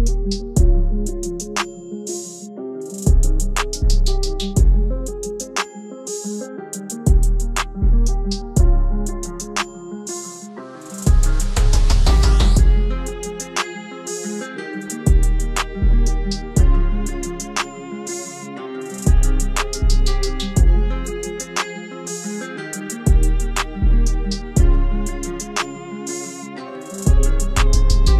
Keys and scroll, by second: 14.4 ctrl+s.